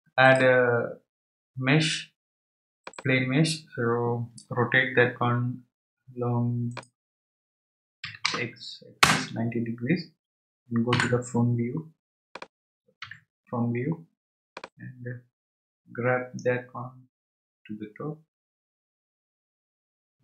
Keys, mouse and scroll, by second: 0.2-3.3 drag, 6.7-9.8 drag, 10.9 KP_1, 12.3 click, 14.5 click.